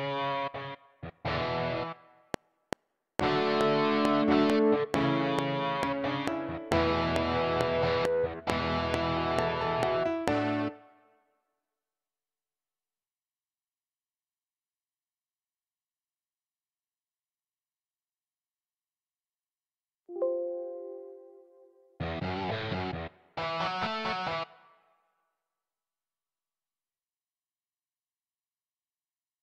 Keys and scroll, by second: 2.2 F7, 10.6 space, 15.9 Escape, 26.6 Tab.